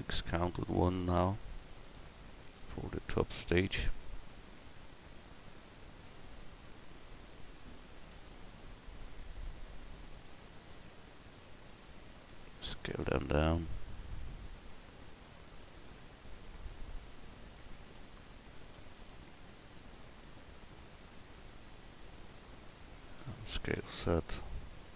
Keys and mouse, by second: 0.5-1.6 middle drag, 3.9 middle click, 4.9-7.3 middle drag, 8.0 KP_Decimal, 8.9-12.6 middle drag, 12.9 s, 17.9 KP_1, 23.2 s.